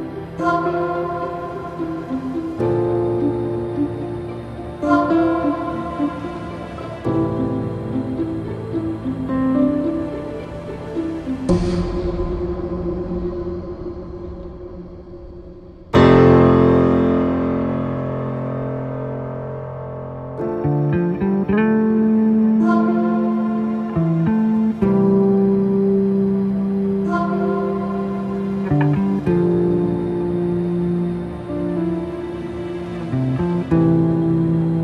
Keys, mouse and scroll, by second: 1.4-4.5 drag, 21.1-22.3 middle drag, 22.3 click, 24.1 Delete, 24.9 scroll down 2, 25.3-26.2 shift+middle drag, 26.2 click, 27.4 shift+click, 28.9 ctrl+j, 30.6 s.